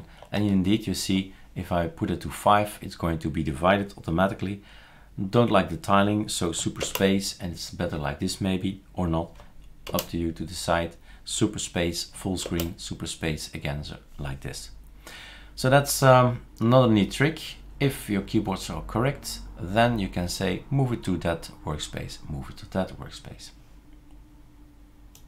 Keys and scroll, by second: 0.3 shift+super+8, 6.9 super+space, 10.0 super+space, 12.5 super+space.